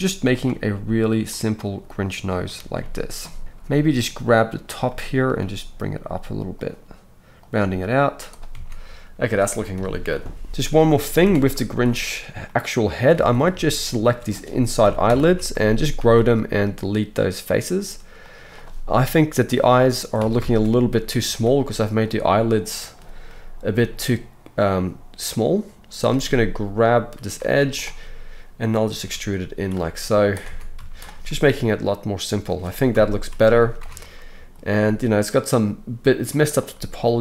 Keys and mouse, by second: 0.3 middle click, 0.4-0.9 right drag, 0.9 click, 1.6-4.5 middle drag, 2.7 Tab, 3.4 alt+a, 4.5 click, 5.4 g, 7.4 click, 7.5 g, 8.5 Tab, 9.7 KP_1, 10.5-10.8 middle drag, 10.8 click, 10.9-13.8 middle drag, 11.2 Tab, 13.1 alt+a, 13.8 alt+shift+click, 13.9-19.3 alt+shift+middle drag, 14.8 ctrl+KP_Add, 15.0 ctrl+KP_Add, 16.0 x, 19.3-20.5 drag, 20.2 alt+a, 20.5-37.2 alt+shift+middle drag, 21.2 s, 23.7 g, 27.4 z, 29.0 e, 29.8 s, 30.5 Tab, 30.8 z, 32.9 KP_1, 33.8 Tab.